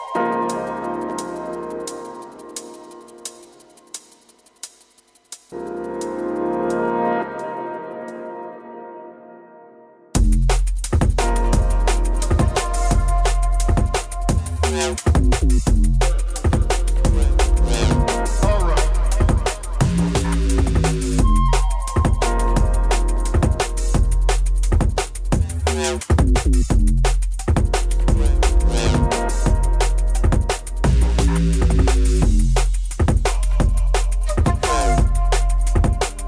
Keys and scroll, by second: 29.8 scroll, 30.6 scroll.